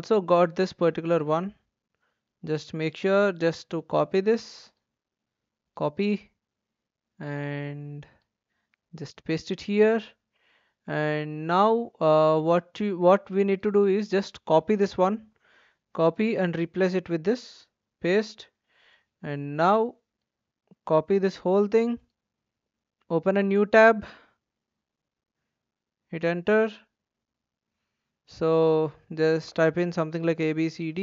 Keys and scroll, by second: 5.2 ctrl+c, 8.6 ctrl+v, 15.2 ctrl+c, 17.4 ctrl+v, 20.9 ctrl+c, 24.7 ctrl+v, 25.1 Return, 30.3-31.0 typing.